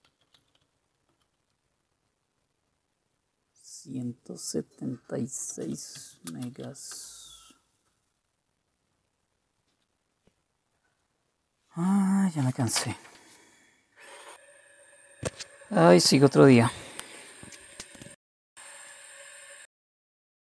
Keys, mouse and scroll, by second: 0.0-1.8 typing, 5.3-7.2 typing.